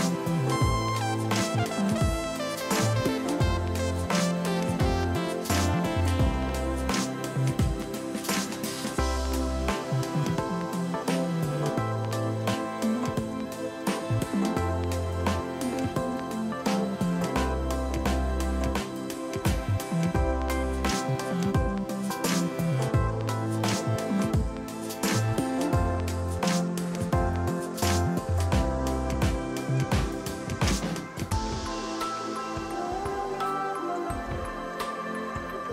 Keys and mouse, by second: 4.5 Escape, 5.0 click, 7.4 ctrl+shift+x, 7.5 click, 8.5 ctrl+shift+x, 8.6 click, 9.8 ctrl+1, 10.0 click, 11.4 click, 12.0 ctrl+1, 12.1 click, 12.7 ctrl+shift+x, 12.9 click, 13.6 Up, 13.9 Left, 14.1 Right, 14.3 Up, 14.5 Escape, 14.9 click, 15.2 Up, 15.5 click, 16.1 ctrl+z, 16.6 ctrl+q, 16.8 click, 17.3 click, 17.4 ctrl+1, 17.5 ctrl+click, 17.7 ctrl+r, 17.9 click, 18.5 Escape, 21.9 Escape, 22.7 ctrl+q, 22.8 click, 23.8 z, 24.0 click, 25.4 ctrl+1, 26.2 click, 27.4 a, 27.5 click, 28.3 ctrl+1, 28.4 click, 28.6 x, 28.7 click, 29.3 ctrl+1, 29.3 click, 29.5 Delete, 30.0 click, 30.7 ctrl+x, 31.0 ctrl+z, 31.1 click, 31.6 x, 31.7 click, 32.0 ctrl+1, 32.1 click, 34.8 click.